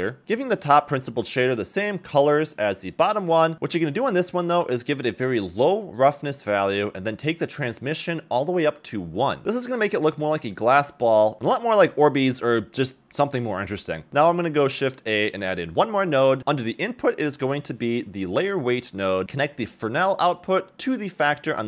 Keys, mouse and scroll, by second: 0.5 click, 0.8 scroll up 2, 1.3 middle click, 1.5-2.6 drag, 2.9 middle click, 3.1 middle click, 3.7 middle click, 3.7 scroll up 2, 4.2-5.4 drag, 5.9 click, 7.8 click, 10.4 ctrl+shift+click, 14.1 ctrl+shift+click, 14.1 middle click, 14.1 shift+a, 19.2 middle click, 19.2 click, 19.2 scroll up 3.